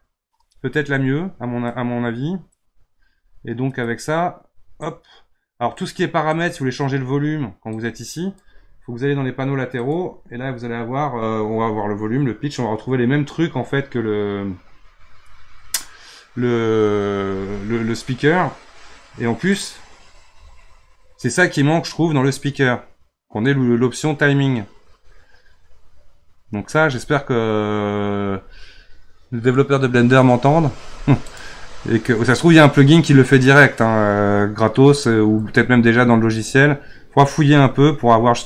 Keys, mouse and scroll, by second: 4.9-6.4 drag, 7.7-12.8 drag, 19.5-20.4 drag, 20.4-21.4 scroll down 6, 31.2-34.4 drag.